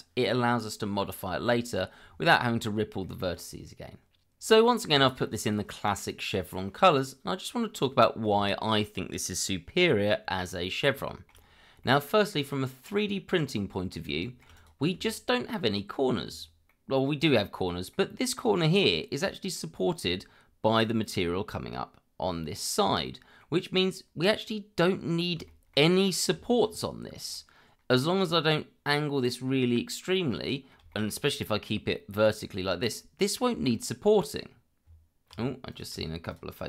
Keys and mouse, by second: 3.0-4.4 middle drag, 6.7-10.8 middle drag, 11.0 shift+middle drag, 11.8-12.4 middle drag, 13.4-13.9 middle drag, 14.2 shift+middle drag, 14.5 click, 14.9 Tab, 16.6 middle click, 17.2 click, 17.9-19.5 middle drag, 23.0 middle click, 25.5 shift+middle click, 26.2 Tab, 27.3-28.0 middle drag, 29.7-30.7 middle drag, 30.9 shift+middle drag, 32.4-32.9 middle drag, 33.7-34.4 middle drag, 34.8 Tab, 35.7 click, 36.3 shift+click.